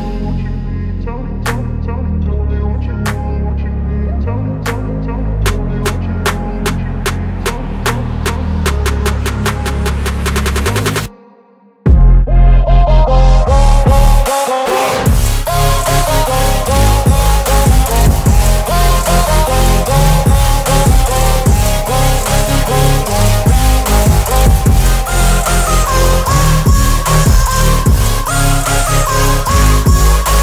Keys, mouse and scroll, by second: 0.3 Delete, 1.8 ctrl+d, 4.7 ctrl+d, 4.9 ctrl+0, 7.2 ctrl+0, 7.2 click, 8.3 right click, 9.3 click, 12.3 right click, 12.4 right click, 12.8 click, 13.6 alt+scroll up 1, 15.0-17.2 shift+drag, 18.6-20.5 drag, 22.7 alt+scroll up 1, 23.4-24.7 drag, 25.6 Right.